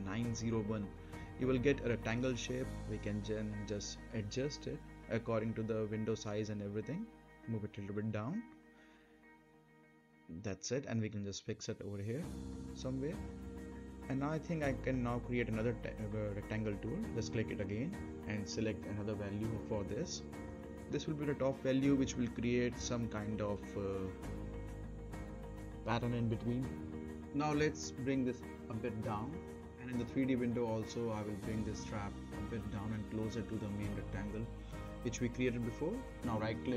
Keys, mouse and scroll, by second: 0.8 typing, 2.1 click, 3.6-4.2 scroll up 1, 4.3 right click, 4.7 scroll down 1, 4.9 middle click, 5.4 click, 6.1 right click, 7.4-11.8 drag, 11.9-12.5 right click, 12.7 scroll down 1, 12.9-14.6 middle drag, 15.8 click, 18.3-19.8 typing, 20.7 click, 21.5 4, 23.8 4, 23.9-29.1 drag, 29.6 scroll up 1, 29.9 right click, 30.3 middle click, 31.7-34.1 drag, 35.8 right click.